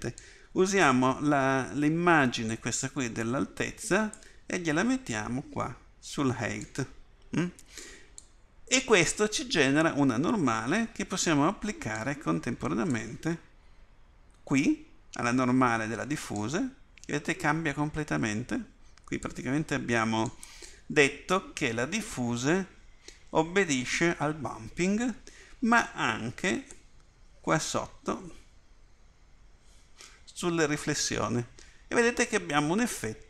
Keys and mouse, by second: 19.3 right click, 27.0-31.0 drag, 32.9 middle click.